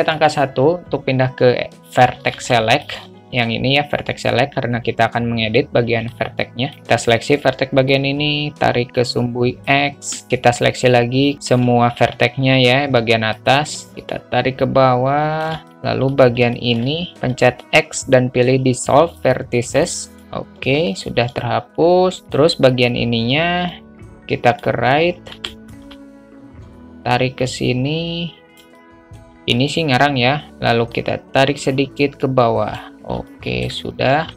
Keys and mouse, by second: 0.5 1, 2.8 middle click, 2.8 shift+a, 6.4 click, 8.2-9.9 drag, 11.4 shift+a, 11.4 shift+middle click, 11.5 shift+a, 13.9-15.7 drag, 15.7 alt+middle click, 16.5 click, 16.8 shift+a, 16.8 shift+middle click, 16.9 shift+a, 17.6 x, 20.2 alt+middle click, 21.7 alt+middle click, 22.4 alt+middle click, 23.1-25.6 drag, 25.7 shift+a, 25.8 middle click, 27.0-28.9 drag, 28.9 shift+a, 29.0 shift+middle click, 29.9 click, 31.3-33.1 drag, 33.6 alt+middle click.